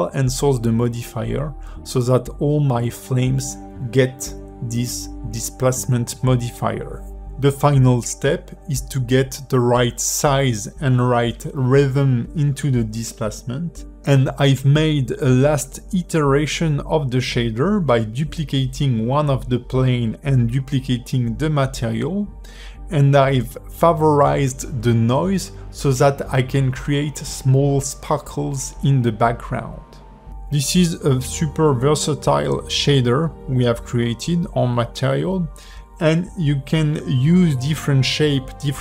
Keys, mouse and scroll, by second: 0.8 ", 1.3 space, 2.4 alt+middle click, 2.9 ", 4.5 alt+middle click, 5.5 space, 6.4 ", 6.7 space, 7.7 alt+middle click, 9.5 scroll down 3, 9.6 middle click, 10.2-10.8 scroll up 3, 10.9 ", 11.8 ", 11.9-12.3 scroll up 2, 12.3 middle click, 13.5 space, 13.6 scroll down 3, 13.8 middle click, 13.9 ", 14.1 scroll up 1, 14.2 middle click, 14.4 click, 14.5 middle click, 14.7 click, 14.8 alt+middle click, 15.2 shift+d, 15.9 s, 16.5 scroll down 2, 16.6 middle click, 17.2 click, 17.6 space, 17.8 ", 18.1 scroll down 3, 18.3 shift+middle click, 18.8-19.1 scroll up 2, 19.1 click, 20.8 scroll up 3, 21.1 KP_1, 21.5 scroll down 5, 21.6 shift+middle click, 22.0 scroll up 2, 22.1 shift+middle click, 22.8 click, 23.7 shift+middle click, 24.3 shift+middle click, 25.2 click, 25.9 click, 26.3 shift+middle click, 27.2 shift+middle click, 27.3-28.0 scroll up 1, 28.0 scroll up 2, 28.2 shift+h, 28.7 click, 29.4 shift+middle click, 30.3 click, 31.3 click, 31.8 click, 32.2 click, 32.9 click, 33.3 click, 34.3-34.6 scroll down 2, 34.8 alt+h, 35.3-36.0 scroll up 4, 36.1 shift+middle click, 36.5 click, 37.4 click.